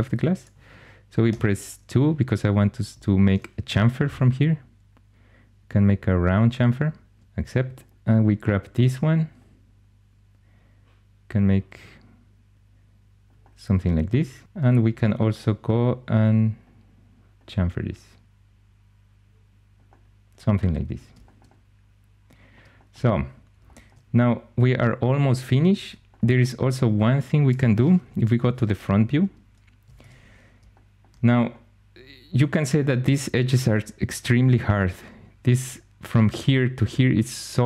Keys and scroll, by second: 1.2 2, 27.9 1, 29.9 shift+super+e.